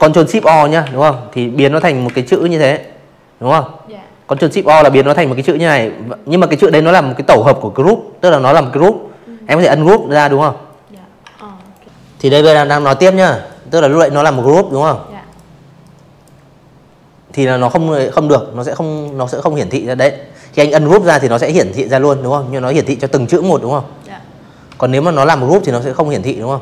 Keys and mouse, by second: 1.6 ctrl+shift+o, 3.4 right click, 6.7 click, 7.2 click, 7.6 drag, 8.3 ctrl+z, 8.6 click, 9.3 drag, 10.1 ctrl+z, 12.2 click, 12.7 click, 15.8 click, 17.7 v, 19.1 click, 21.6 v, 21.9 click, 23.0 right click, 24.2 click, 24.6 click, 24.9-25.4 drag, 26.3 ctrl+g.